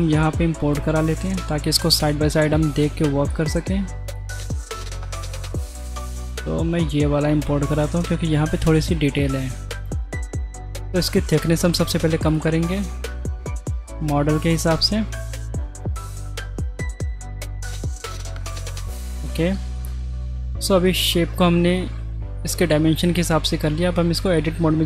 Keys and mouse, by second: 1.7 right click, 9.6 shift+middle click, 10.6 click, 11.0 s, 12.8 middle click, 13.4 s, 17.0 middle click, 18.0 s, 18.8 middle click, 19.2 shift+middle click, 19.8 middle click, 20.0 Tab, 20.2 middle click, 20.6 shift+middle click, 21.7 middle drag, 23.0 shift+middle click.